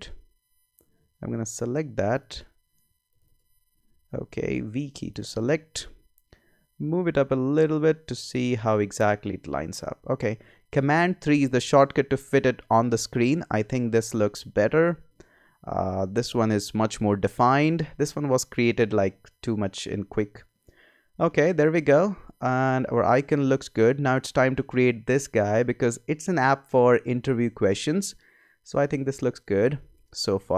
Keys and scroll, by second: 0.3 Up, 4.6 v, 6.7 Up, 11.3 super+3.